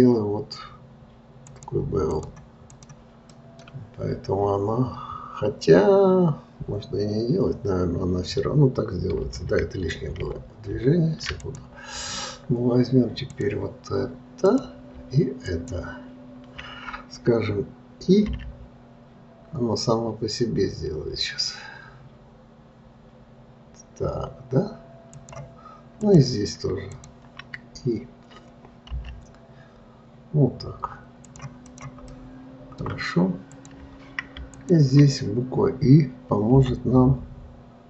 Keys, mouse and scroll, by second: 2.5 click, 3.0 click, 3.6-6.7 middle drag, 10.6 ctrl+z, 11.7 click, 13.7-14.9 drag, 15.7 shift+click, 26.4 click, 27.3 shift+click, 32.0 click, 32.4-33.9 middle drag, 33.9 click, 34.9 shift+click.